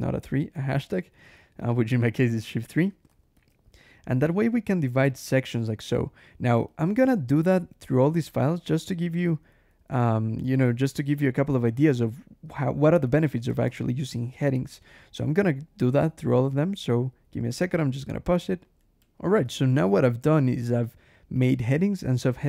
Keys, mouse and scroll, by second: 0.0-0.8 typing, 0.6 shift+Escape, 2.2-5.7 typing, 2.9 shift+Escape, 8.9 shift+k, 10.1 shift+0, 11.4-13.8 typing, 13.5 shift+Escape, 16.4-16.9 shift+scroll down 1, 18.9 shift+\, 19.8 click, 20.1 Escape, 20.3 j, 21.2 click, 21.8 click, 22.1 Escape, 22.3 o.